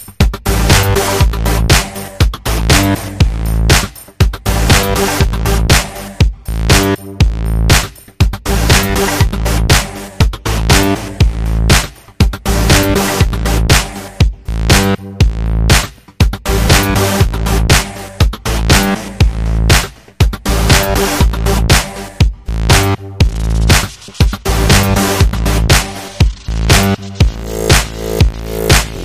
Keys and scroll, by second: 3.3 Tab, 3.4 Tab, 3.7 Tab, 3.8 Tab, 4.6 Tab, 11.7 Up, 11.7 Down, 11.8 Right, 11.9 Up, 12.1 Up, 12.3 Up.